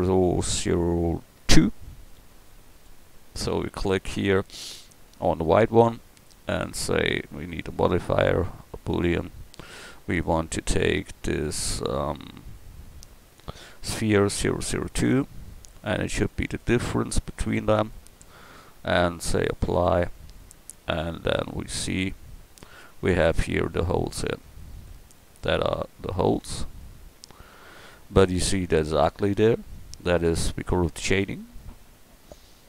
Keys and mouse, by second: 5.2-14.0 drag, 19.6-23.0 drag, 23.0 middle click, 23.4 click, 24.2-30.0 drag.